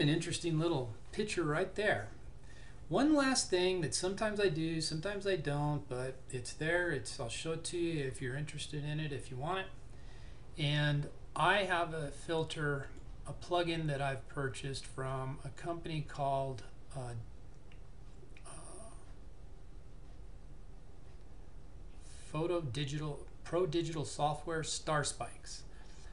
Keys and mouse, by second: 0.3 typing, 12.9 click.